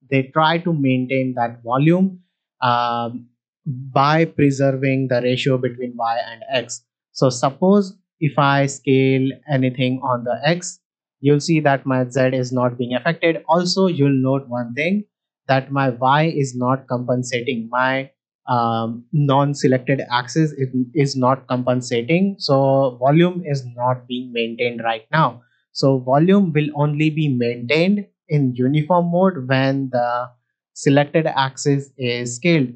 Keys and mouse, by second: 8.0-9.3 drag, 9.8-15.5 drag, 17.7 middle drag, 30.2 middle click.